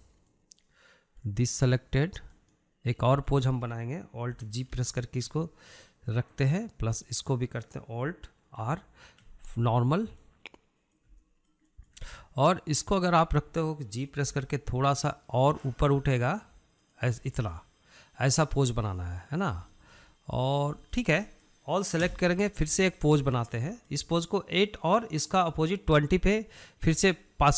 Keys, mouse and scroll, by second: 3.4 click, 4.1-5.9 middle drag, 5.9 alt+g, 7.0-8.1 middle drag, 8.1 click, 9.8 alt+r, 10.9-13.9 shift+middle drag, 13.9 click, 15.4 g, 18.2-18.7 scroll down 1, 18.7-23.2 middle drag, 23.2 a, 24.0 ctrl+drag, 24.8-27.5 shift+middle drag.